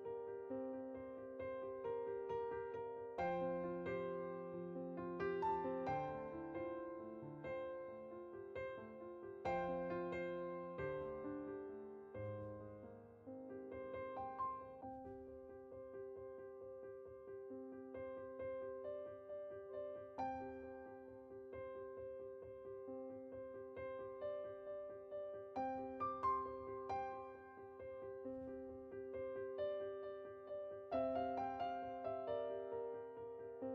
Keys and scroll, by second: 2.1-2.5 typing, 5.4 Tab, 25.6 Tab.